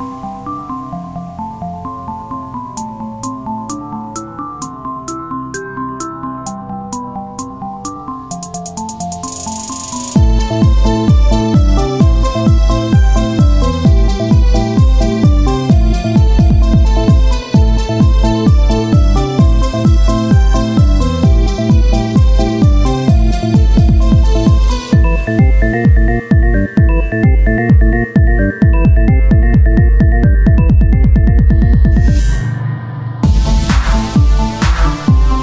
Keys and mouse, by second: 0.2 c, 0.6 click, 0.6 z, 2.0 r, 3.3-4.8 drag, 4.1 Tab, 7.5 KP_1, 8.0 z, 10.5 shift+d, 12.5 z, 13.1 z, 14.0 z, 14.6 click, 16.3 click, 16.5 Tab, 20.0 ctrl+r, 21.9-24.4 drag, 26.0 r, 30.2 ctrl+Tab, 30.7 click, 31.7 z, 33.3 z, 34.0 x, 34.3 click.